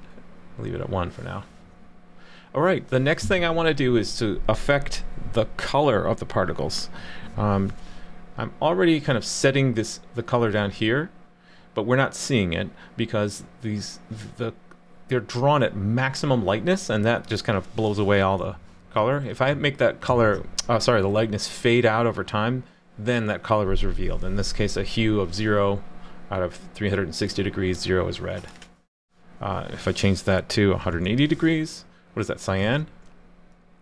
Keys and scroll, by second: 18.4 super+/, 20.1 super+s, 32.6 super+s.